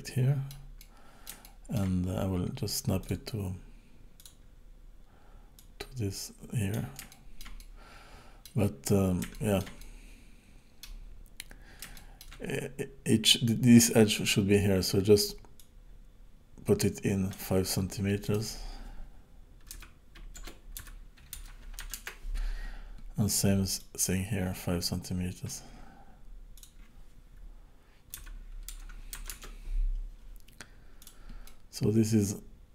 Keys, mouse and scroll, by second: 1.5 shift+middle click, 3.0 click, 5.6 click, 7.1 shift+middle click, 7.6 middle click, 8.8-9.3 scroll up 2, 9.3 shift+middle click, 9.8 middle click, 11.3-11.9 scroll up 2, 12.0 shift+middle click, 15.6 click, 18.4 click, 23.8 click, 26.5 click, 31.0 click, 31.4 middle click.